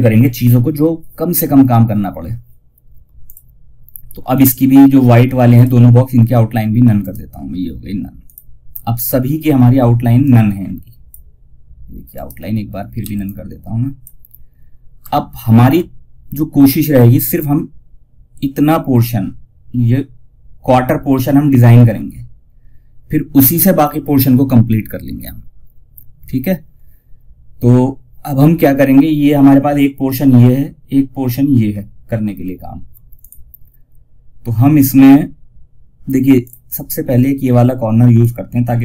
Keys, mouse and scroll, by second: 2.5 click, 6.3 right click, 7.5 click, 8.7 scroll down 1, 9.5-11.4 drag, 11.4 right click, 12.3 F2, 12.5-14.6 drag, 14.6 alt+scroll down 1, 32.5 click, 35.7-38.8 drag.